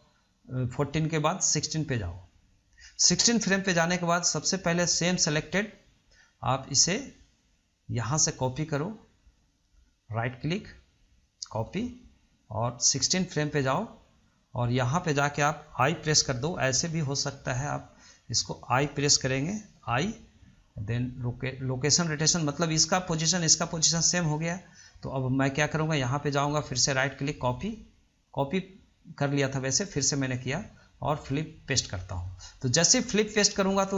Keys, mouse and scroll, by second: 8.3-10.3 drag, 10.3-12.9 right drag, 12.9-17.0 drag, 25.1-26.6 drag, 26.8-28.5 right drag, 28.5-30.1 drag, 30.1-33.9 right drag.